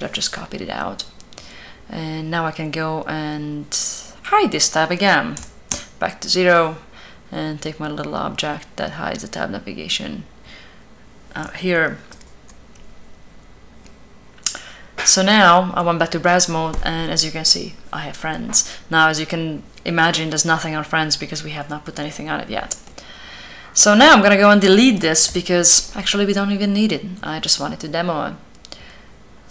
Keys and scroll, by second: 5.1 0, 5.4 Return, 11.8 b, 25.0 l.